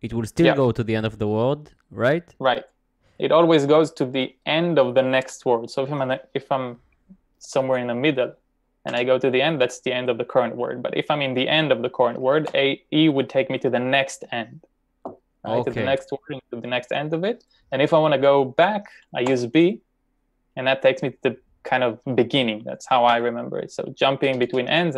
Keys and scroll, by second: 7.5 typing, 9.5 e, 12.5 e, 19.3 b, 23.2 b, 24.2 typing.